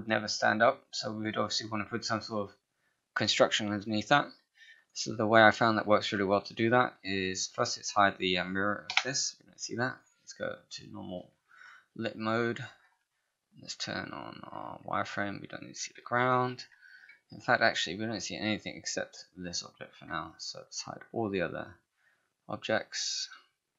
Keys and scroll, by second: 8.9 BackSpace, 10.8 5, 16.4 ctrl+h.